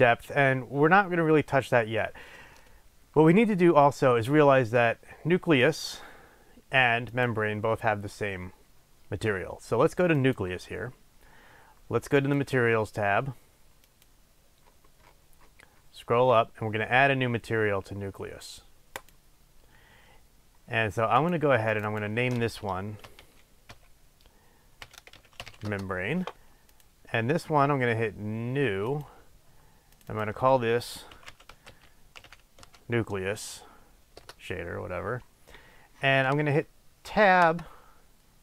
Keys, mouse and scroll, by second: 7.1 click, 10.3 click, 12.2 click, 13.9 click, 14.7-17.9 scroll up 1, 19.1-20.6 drag, 21.2 click, 21.8-26.9 drag, 25.8 Return, 28.9 click, 30.2-37.7 drag, 37.7 3.